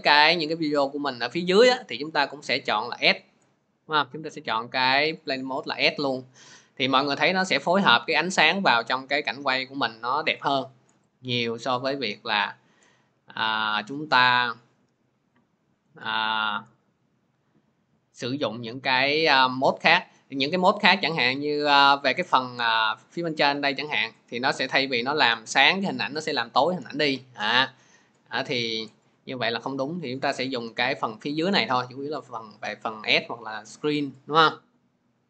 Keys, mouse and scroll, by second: 3.9-15.4 drag, 18.1 click, 19.1 click, 24.0 click, 25.1 click, 26.1 click.